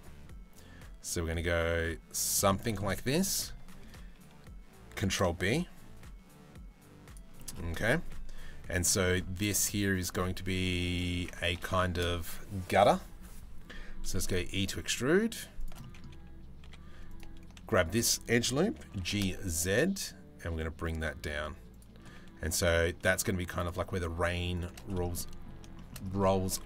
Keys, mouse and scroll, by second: 2.1 shift+middle click, 2.7 shift+middle click, 4.6 ctrl+b, 7.0 shift+middle click, 8.3 middle click, 8.7 shift+middle click, 10.6 3, 11.4 shift+middle click, 13.9 e, 15.4 middle click, 16.3 2, 18.5 g, 24.2 alt+shift+click, 24.8 middle click, 25.4 shift+middle click, 26.1 g.